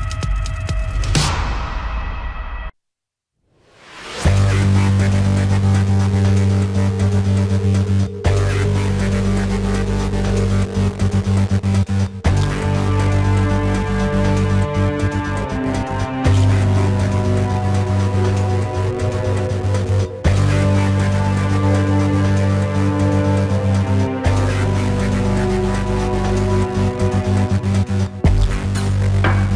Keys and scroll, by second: 3.0 ctrl+=, 3.3 ctrl+=, 4.7 space, 18.5 ctrl+=, 19.1 ctrl+=, 20.7 ctrl+=, 21.0 space, 21.4 space, 21.6 ctrl+=, 21.7 space, 23.0 ctrl+=, 23.3-26.6 typing, 28.0 space.